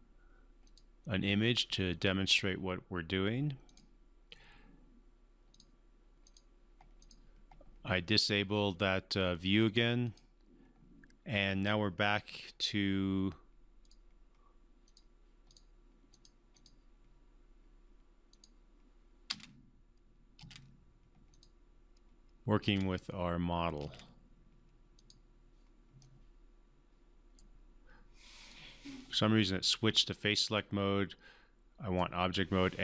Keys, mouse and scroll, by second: 0.6 click, 3.7 click, 9.7 click, 13.8 click, 19.3 space, 21.3 click, 22.6 space, 25.0 click, 26.0-27.6 right drag, 28.4 click, 30.5-32.1 right drag.